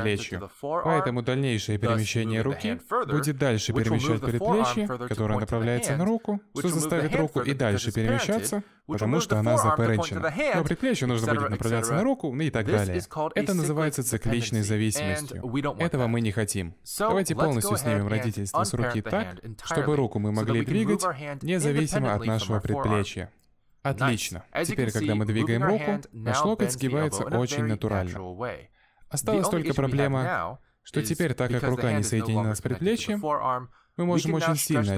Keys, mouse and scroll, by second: 1.5 middle click, 2.4 scroll down 1, 2.6 middle click, 3.7 g, 17.0 middle click, 17.6-18.2 scroll up 2, 18.1 ctrl+z, 18.2 middle click, 18.7 scroll up 1, 18.8 Tab, 19.1 click, 19.5 click, 20.7 alt+p, 25.1 Tab, 26.1 middle click, 26.8 g, 29.6 scroll down 1, 29.7 middle click, 30.2 z, 30.7 shift+middle click, 30.9 scroll down 1, 31.0 middle click, 31.3 g, 33.0 middle click, 33.7 g.